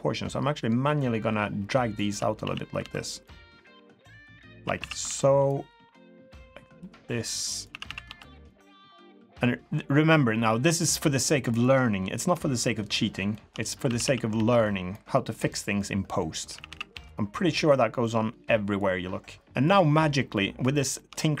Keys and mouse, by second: 0.3 click, 2.1 a, 2.3 a, 2.8 a, 2.8 b, 3.7-4.6 drag, 4.6 a, 4.8 a, 5.0 b, 6.0 click, 7.7 a, 7.8 a, 8.0 b, 9.2 click, 12.0-12.3 middle drag, 12.6 shift+middle click, 12.8 shift+click, 13.3 shift+drag, 13.8 a, 14.0 a, 14.3 b, 15.6 click, 16.5 a, 16.7 a, 16.9 b, 18.7 click, 19.6 click, 20.3 middle drag, 20.9 shift+middle drag.